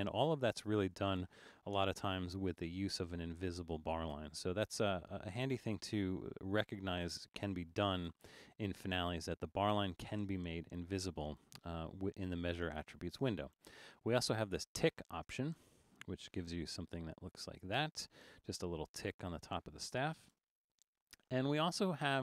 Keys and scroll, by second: 1.8 Return, 16.3 super+=, 16.5 super+=, 16.8 super+=, 20.4 Return.